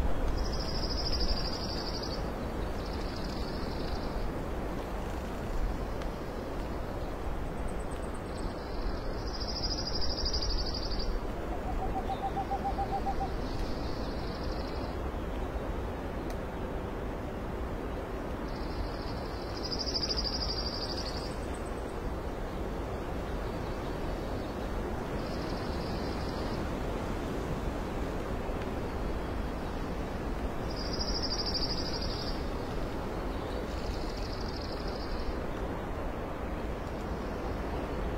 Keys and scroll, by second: 0.1 space, 1.1 space, 1.5 space, 3.1 alt+space, 5.5 ctrl+z, 15.4 ctrl+i, 16.0 ctrl+alt+x, 16.1 ctrl+alt+z, 16.3 ctrl+alt+BackSpace, 16.5 ctrl+b, 16.7 Delete, 16.7 Delete, 18.6 ctrl+alt+z, 21.1 alt+space, 28.0 x, 31.3 ctrl+z, 31.7 ctrl+z, 36.0 ctrl+i, 37.9 x, 38.0 space.